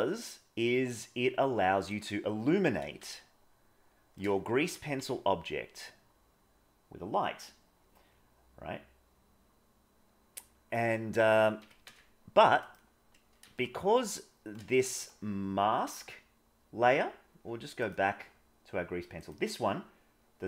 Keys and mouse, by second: 3.1-4.1 shift+middle drag, 4.6 g, 11.5 g, 13.6-14.5 middle drag, 14.8 middle click, 17.7 click, 19.2 click.